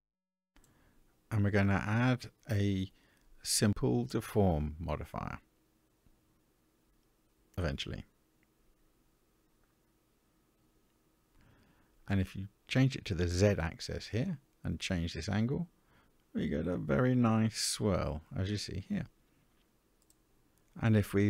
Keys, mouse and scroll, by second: 0.2-1.4 middle drag, 3.4 click, 4.6 click, 6.4-6.7 scroll down 1, 8.8-11.0 drag, 13.0 click, 14.7-18.2 drag, 18.7-20.4 middle drag.